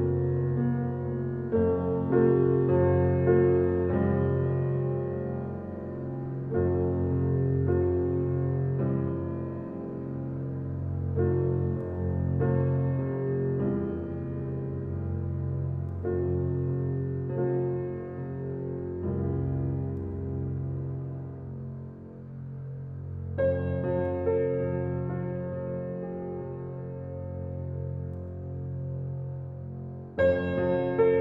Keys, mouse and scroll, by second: 2.2 click, 2.8 scroll down 2, 3.0 click, 5.3 Tab, 5.8 click, 5.9 scroll down 3, 6.4-8.4 middle drag, 8.4 Tab, 8.6 click, 9.0 Tab, 9.1 click, 9.4 Tab, 9.7 click, 10.5 click, 11.0 click, 11.3 Tab, 11.6 scroll down 2, 12.2 middle drag, 12.4 scroll up 2, 12.9-13.5 shift+middle drag, 13.5 Tab, 14.5 alt+middle click, 15.0 shift+middle click, 15.2 scroll up 1, 15.7 alt+z, 16.1 click, 18.2 click, 18.6 click, 20.1 click, 20.8 click, 21.2 drag, 21.5 Tab, 21.7 scroll down 2, 22.0 middle drag, 22.3-22.8 scroll down 3, 23.8-24.6 scroll down 4, 24.1 middle click, 24.6 middle drag, 24.8-25.3 middle drag, 25.3 scroll up 2, 25.6-25.9 middle drag, 25.9-26.2 scroll down 3, 26.2-27.2 middle drag, 27.3 middle click, 27.5-28.8 middle drag, 28.8 click, 29.1-29.8 scroll down 2, 29.8 click, 30.4 click, 30.9 click, 31.1 scroll down 1.